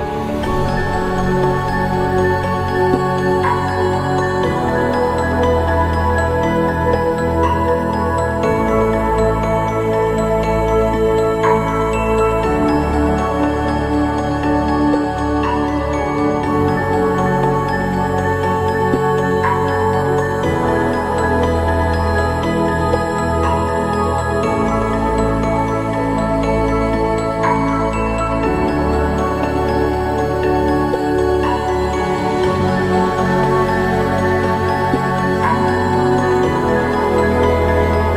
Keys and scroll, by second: 1.1 ctrl+=, 13.3 ctrl+-, 37.4 ctrl+-.